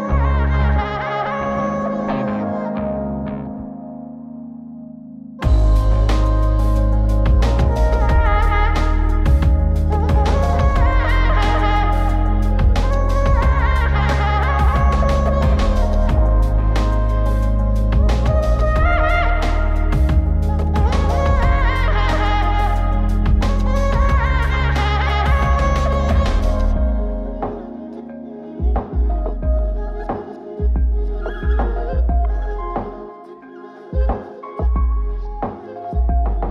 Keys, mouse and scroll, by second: 0.8-3.8 drag, 5.2-5.5 drag, 6.2-7.9 drag, 8.7 click, 9.8 click, 14.6 click, 16.0 click, 17.2 click, 18.4 click, 22.1-22.9 drag, 24.1 click, 25.4 click, 25.9 r, 33.1 click, 33.9-34.5 scroll up 2, 34.5-35.2 drag, 36.0-36.5 drag.